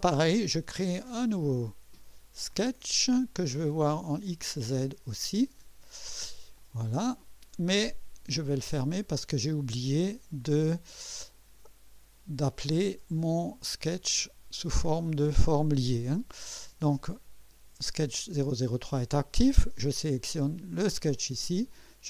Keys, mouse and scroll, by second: 2.5 click, 4.2 click, 6.5 click, 8.8 click, 13.6 click.